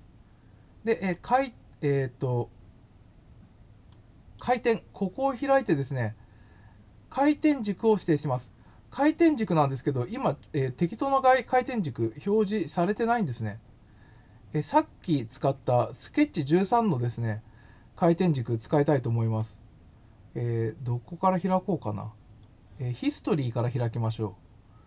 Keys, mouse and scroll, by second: 1.1 click, 3.9 click, 11.1 scroll up 1, 15.1-16.4 drag, 18.7 scroll down 1, 19.5-19.8 scroll up 2, 22.0-22.4 scroll up 2.